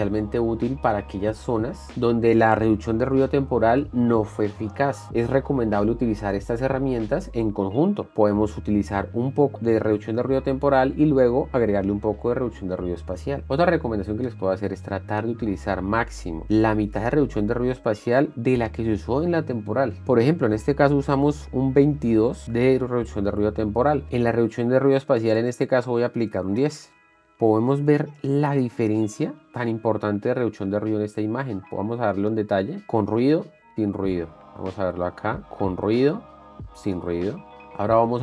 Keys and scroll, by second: 27.0 Return, 29.5 ctrl+d, 29.8 ctrl+d, 33.3 ctrl+d, 35.5 ctrl+d, 36.9 ctrl+d.